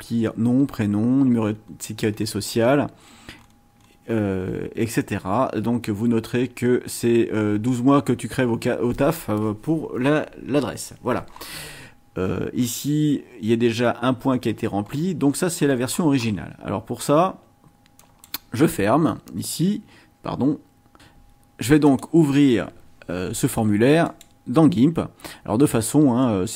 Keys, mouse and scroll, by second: 1.6-4.1 scroll down 12, 4.4-5.1 scroll down 4, 6.0-6.5 scroll down 4, 11.3-11.9 scroll up 4, 12.2-12.8 scroll down 4, 14.9-16.5 scroll up 6, 18.0 click, 21.0 click, 21.9 click, 24.1 right click.